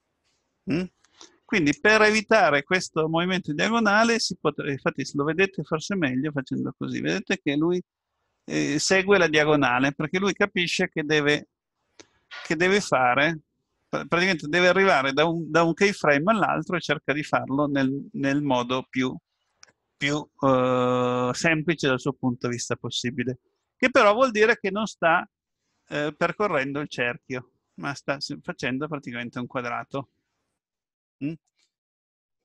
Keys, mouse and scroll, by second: 3.6 KP_7, 6.4 click, 13.3-14.0 scroll down 3, 24.8 middle click, 30.3-31.0 scroll up 3, 31.1 middle click.